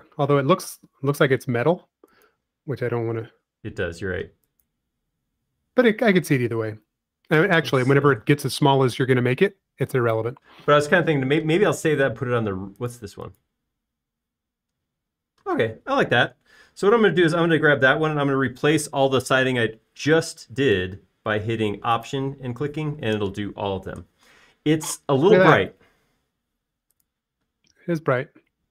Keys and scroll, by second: 25.9 space.